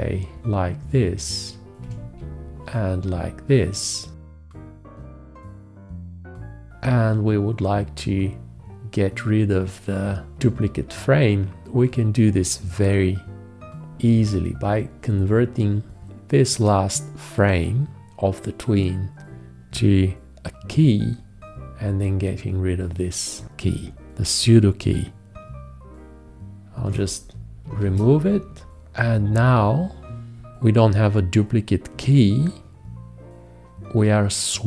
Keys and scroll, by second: 2.1 4, 20.9 x, 27.1 shift+z, 28.1 shift+z.